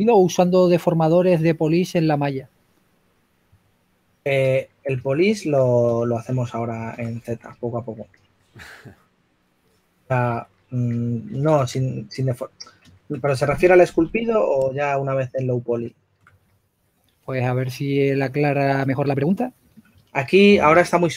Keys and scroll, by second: 5.0 4, 6.2-8.0 typing, 10.9 s, 14.2-15.4 typing.